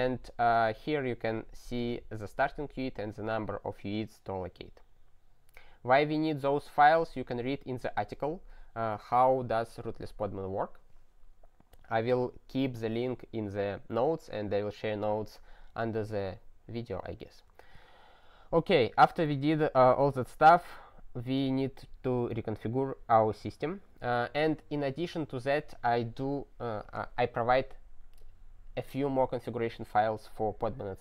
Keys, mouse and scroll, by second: 0.5 click, 1.7 click, 3.1 click, 3.2 click, 3.2 double click, 3.3 double click, 7.0-7.9 scroll, 17.6 double click, 22.1-22.7 scroll up 5, 23.6 click.